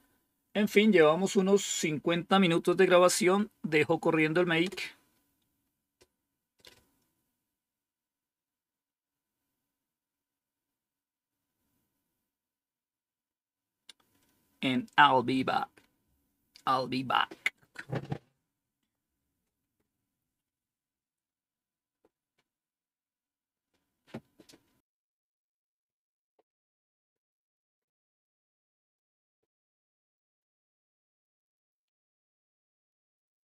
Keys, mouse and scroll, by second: 4.5 Return.